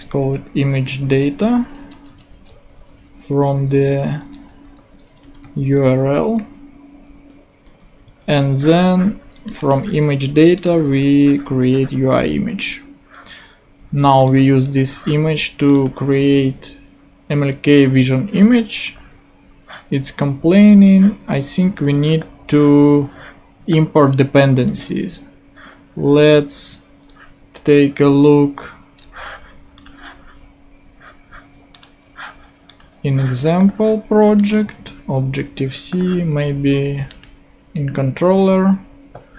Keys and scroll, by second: 0.0-1.9 typing, 2.5 super+space, 2.7 super+Right, 3.8 Left, 4.5-5.8 typing, 6.0 super+Right, 6.4 super+;, 7.1 ;, 8.0 Down, 9.9 super+c, 10.7 super+v, 24.7 super+Tab.